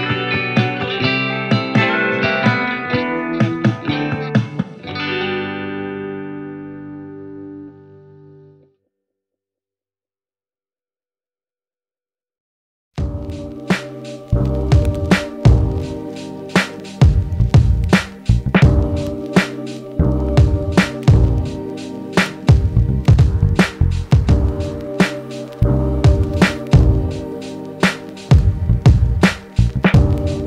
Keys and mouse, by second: 0.9 g, 8.1 ctrl+z, 17.1 g.